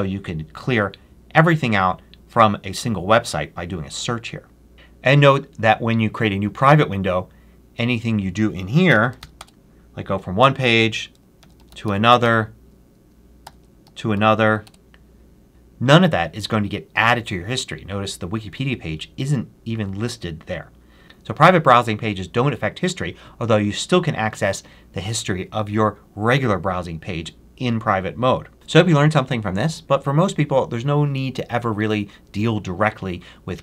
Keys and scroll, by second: 8.5-9.6 typing, 11.3 super+l, 11.3-12.2 typing, 13.0 super+Return, 13.3 super+t, 13.7 super+a, 14.0 r, 14.5 Return.